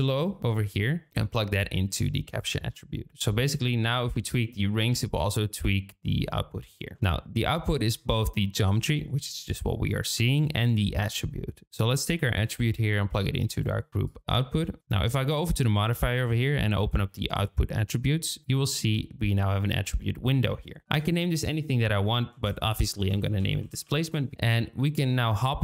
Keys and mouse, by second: 10.6-13.8 drag, 14.0 click, 16.7 click, 18.4-24.3 drag.